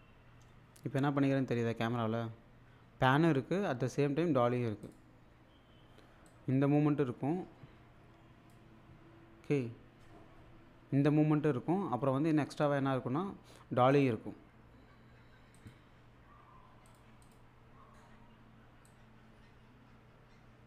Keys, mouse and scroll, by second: 4.9 click, 6.3-8.8 drag, 13.9 click, 15.6 click, 16.9 click, 18.9-20.6 drag.